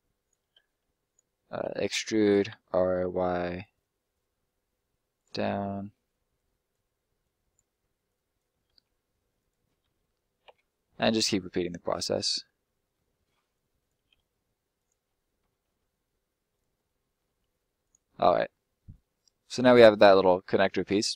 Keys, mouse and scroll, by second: 0.5 r, 1.0 right click, 1.6 e, 2.1 click, 2.4 r, 2.9 y, 5.1 click, 5.6 middle click, 6.3 click, 8.6 e, 9.3 click, 9.8 r, 10.5 y, 12.2 click, 12.3 middle click, 13.5 click, 14.1 e, 14.7 click, 15.0 r, 15.6 y, 16.5 click, 16.9 middle click, 17.2 e, 17.7 click, 18.0 middle click, 18.7 scroll down 1, 18.9 middle click.